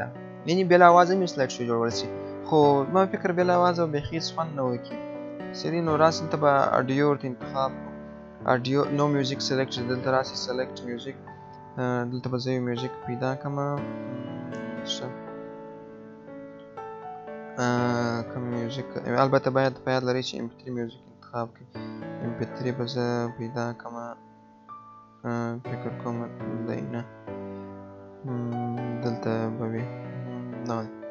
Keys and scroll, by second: 26.4 BackSpace.